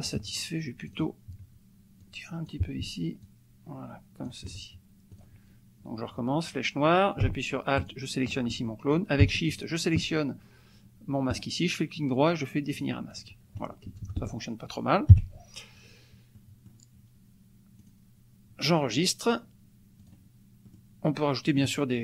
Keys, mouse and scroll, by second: 0.1 ctrl+click, 0.9 click, 2.0 click, 3.3-4.4 ctrl+drag, 5.1 click, 7.7 alt+click, 9.6 shift+click, 11.3 right click, 11.5-12.7 middle drag, 12.7 click, 13.2 click, 13.9 KP_Add, 15.1 KP_5, 16.4 click, 17.8 click, 18.7 click, 20.3 click, 20.7 click, 21.0 click.